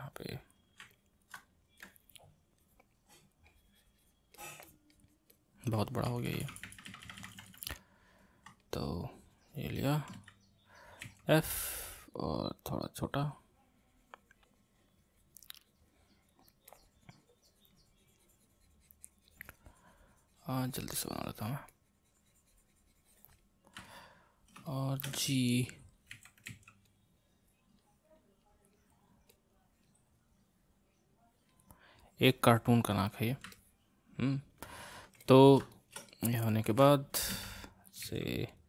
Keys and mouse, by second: 0.9 ctrl+middle click, 1.8-6.1 drag, 6.1-7.7 ctrl+z, 8.6-10.2 drag, 10.2 c, 11.0 f, 12.5-15.5 drag, 16.7-19.7 drag, 21.7-23.8 drag, 23.8-26.1 middle drag, 26.1 g, 26.5 f, 27.3-33.5 drag, 33.5-37.3 middle drag, 37.3 c, 38.0 f.